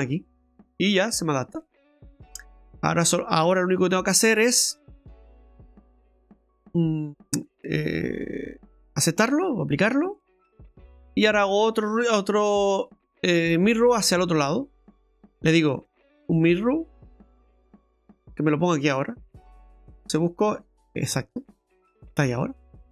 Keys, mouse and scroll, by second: 1.9-3.8 scroll down 2, 3.8 click, 4.2 click, 8.5 click, 10.2 middle click, 11.7 click, 15.8 click, 20.0 click, 21.4 click, 22.1 middle click.